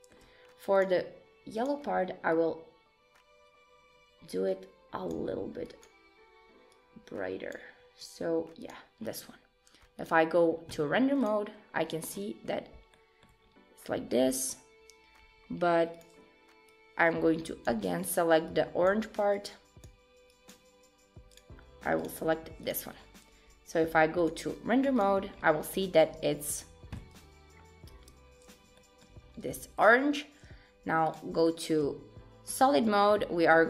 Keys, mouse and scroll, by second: 0.8 click, 1.6 click, 8.6 click, 9.0-10.1 scroll down 2, 10.1 click, 10.8-11.2 scroll down 3, 11.2 click, 11.8 scroll down 2, 12.1-12.7 scroll up 1, 12.7 scroll up 3, 12.9 shift+middle click, 13.4-13.9 scroll up 2, 16.0 click, 16.7 click, 18.5 shift+click, 22.0 click, 22.7 click, 23.0 scroll down 3, 24.3 click, 24.6-25.4 scroll down 2, 24.9 click, 25.4-25.8 scroll up 3, 26.2 Tab, 28.0 Tab, 28.8 shift+middle click, 29.2-31.0 scroll up 3, 31.1 click, 31.5 shift+middle click, 32.0-32.3 scroll up 2, 32.8 shift+click.